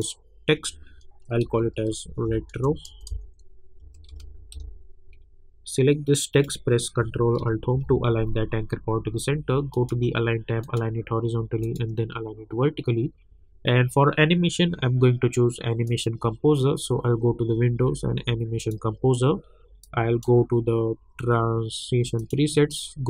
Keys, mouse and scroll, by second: 1.2-5.0 typing, 6.3 click, 7.7 ctrl+alt+Home, 9.7 click, 15.8 click, 18.6-22.2 drag.